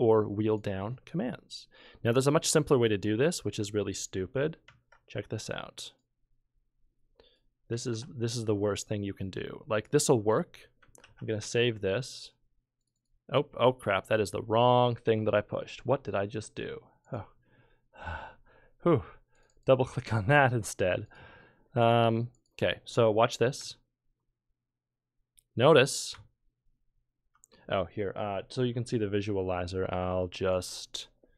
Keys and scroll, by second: 4.7 ctrl+k, 7.9 ctrl+q, 11.0 ctrl+s, 28.9 F23.